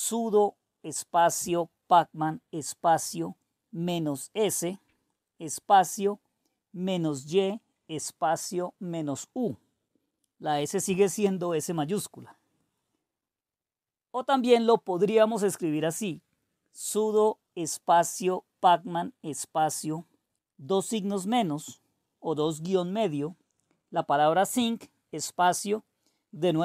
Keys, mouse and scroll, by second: 0.0-3.1 typing, 4.3-6.3 typing, 10.6 Return, 15.1-18.2 typing, 20.7-26.6 typing.